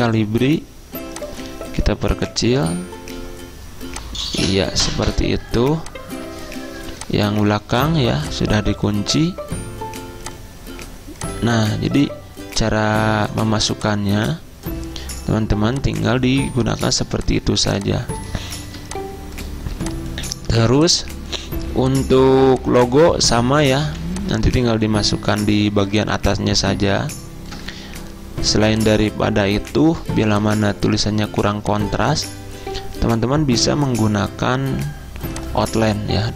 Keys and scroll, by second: 0.0-0.3 typing, 17.6 z, 20.6 z, 23.9 v.